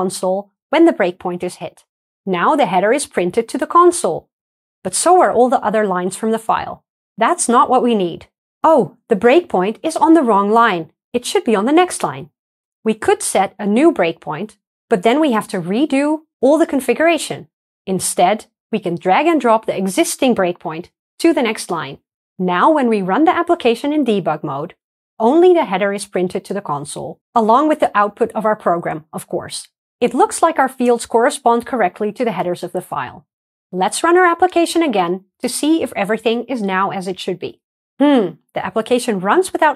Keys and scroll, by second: 23.3 ctrl+d, 23.3 shift+F9, 34.5 ctrl+r, 34.5 shift+F10.